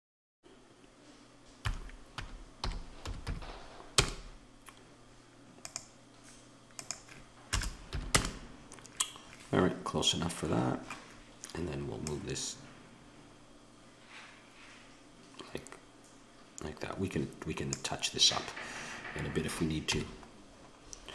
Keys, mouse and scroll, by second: 5.6-10.5 drag, 10.5 middle click, 11.5 middle click, 12.1 click, 12.8 middle click, 13.0 click, 13.9-17.2 middle drag, 19.8 n, 20.8-21.1 middle drag.